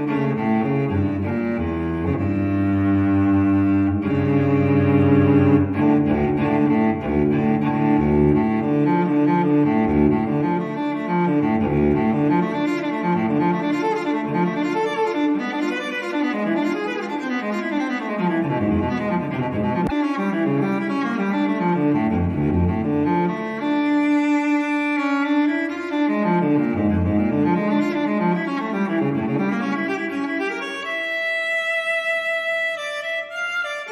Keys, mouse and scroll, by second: 0.3 click, 1.8 click, 2.4 click, 4.9 ctrl+click, 7.0 ctrl+click, 9.4 click, 10.3 click, 11.7 click, 13.4 click, 14.0 click, 15.4 ctrl+click, 17.6 click, 19.4-19.7 scroll down 1, 19.8 scroll up 1, 20.0-20.8 scroll down 1, 21.2 click, 22.0 click, 23.7 right click, 26.7 click, 28.5 click, 30.5 click, 31.6 click, 32.6 click.